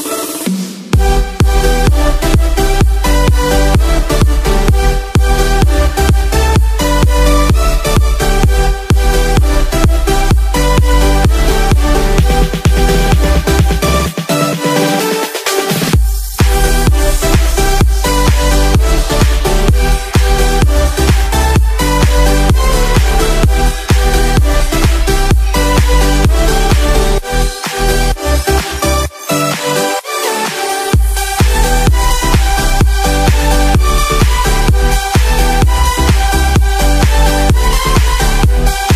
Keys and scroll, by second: 0.3 space, 0.7 ctrl+=, 5.1 ctrl+-, 7.0 ctrl+-, 7.9 ctrl+=, 9.7 space, 10.6 ctrl+-, 11.0 space, 11.2 ctrl+=, 11.4 space, 13.2 space, 16.8 ctrl+=, 18.4 ctrl+-, 19.7 ctrl+-, 21.9 space, 22.5 ctrl+=, 22.7 space, 23.8 ctrl+z, 27.5 space, 27.8 ctrl+=, 28.2 space, 29.0 ctrl+z, 36.8 space.